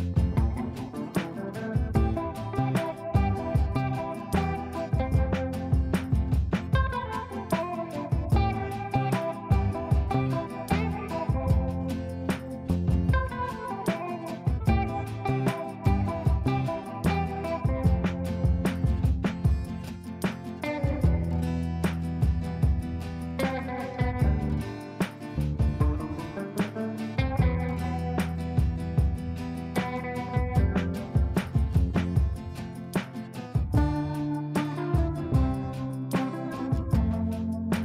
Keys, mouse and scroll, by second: 0.3 click, 3.0-3.9 typing, 3.8 click, 4.0 F3, 5.0 click, 5.2 F3, 5.5 F2, 5.7-6.3 drag, 15.9-17.4 shift+drag, 17.8 F2, 18.0-18.7 click, 21.7 shift+f, 22.1 r, 24.3-27.2 typing, 27.4 ctrl+space, 28.9 click, 31.9-32.8 drag, 34.4 shift+click, 34.8 c, 35.2 click.